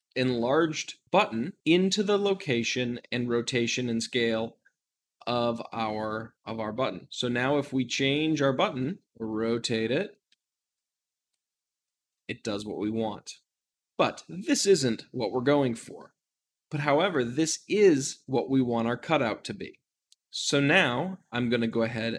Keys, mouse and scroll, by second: 7.2 s, 8.0 right click, 8.4 s, 9.0 r, 10.0 right click, 10.2 ctrl+z, 11.2 `, 12.1-13.7 middle drag, 13.7-19.9 drag, 19.9 g, 21.5 click.